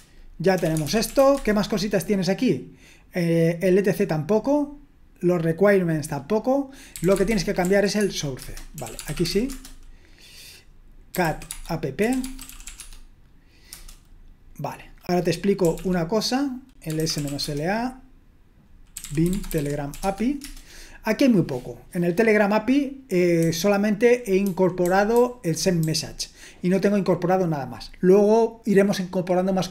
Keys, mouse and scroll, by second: 0.3-1.6 typing, 6.7-9.8 typing, 10.9-14.2 typing, 15.4-20.4 typing, 23.4-25.8 typing.